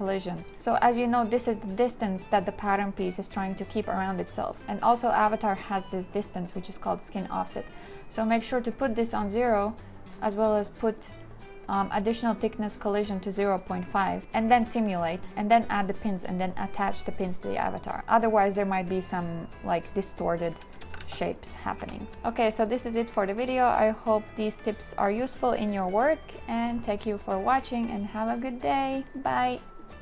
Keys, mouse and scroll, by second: 21.0 ctrl+z, 21.8 2.